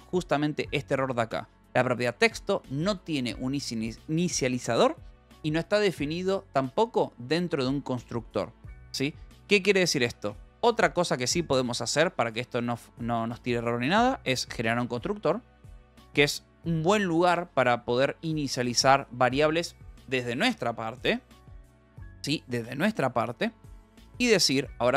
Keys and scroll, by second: 9.5 a, 9.7 Escape, 10.1 Right, 10.3 Return, 11.9-13.1 typing, 14.5 space, 15.0 Return.